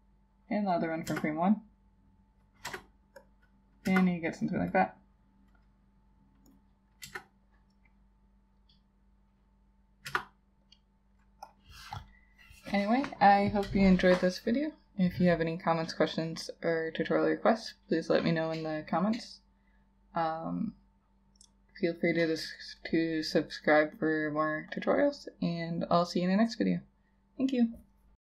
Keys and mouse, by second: 1.1 Return, 2.7 Return, 3.9 Return, 7.1 Return, 10.1 Return.